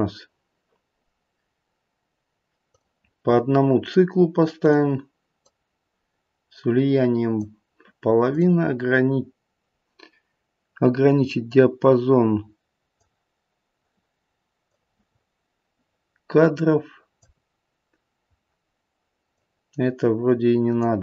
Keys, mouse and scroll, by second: 2.6 click, 3.8 click, 4.6 click, 5.4 click, 8.3 click, 11.4 click, 14.6 click, 19.2 click.